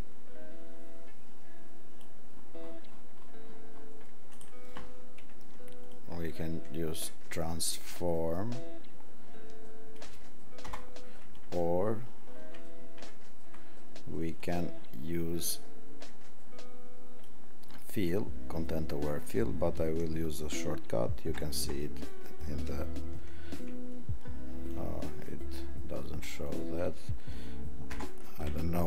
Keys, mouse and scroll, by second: 4.5 right click, 5.8 click, 7.9 click, 12.2 alt+scroll, 12.5 alt+scroll down 4, 13.3 alt+scroll up 2, 17.4 alt+scroll.